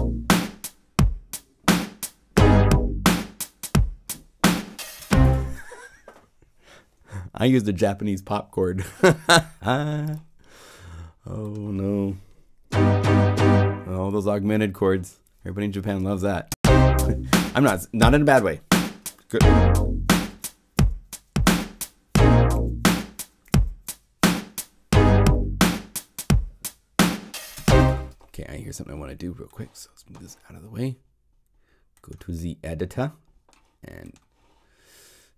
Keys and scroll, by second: 4.9 0, 11.6 p, 27.5 0.